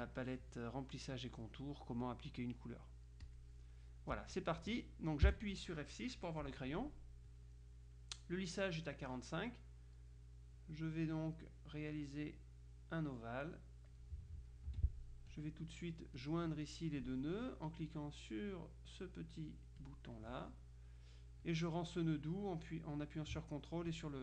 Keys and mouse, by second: 0.1 click, 3.3 click, 5.3 F6, 10.7-14.5 drag, 14.8 F2, 15.4 click, 16.3 click, 19.9-21.1 drag, 21.5 click, 23.9 ctrl+click.